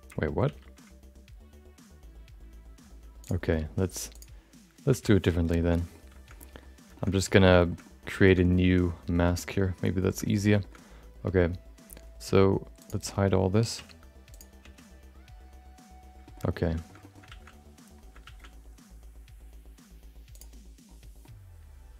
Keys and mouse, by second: 2.0 ctrl+z, 5.1 x, 5.6 shift+middle click, 5.7 middle click, 6.3 middle click, 6.9 shift+middle click, 7.1 middle click, 7.6 shift+middle click, 7.8 middle click, 8.2 shift+middle click, 8.4 middle click, 10.0 shift+middle click, 10.2 middle click, 10.6 shift+middle click, 12.8 click, 14.0 h, 14.9 h, 16.2 middle click, 16.4 middle click, 16.8 middle click, 17.0 middle click, 17.2 shift+a, 18.2 shift+a, 21.2-21.9 middle drag.